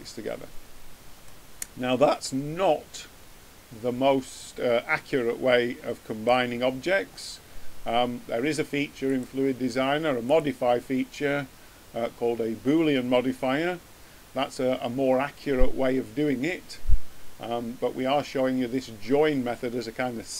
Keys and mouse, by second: 1.4 middle click, 1.6 middle click, 2.4 middle click, 9.1-12.0 drag, 19.2 middle click.